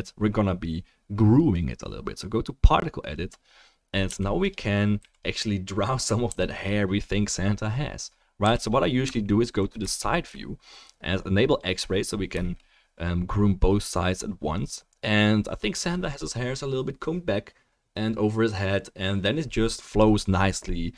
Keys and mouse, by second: 4.0 f, 4.5-7.1 drag, 5.0 f, 6.2 f, 7.1-9.3 middle drag, 7.1-12.3 right drag, 8.4 f, 9.9-14.7 shift+middle drag, 11.5 click.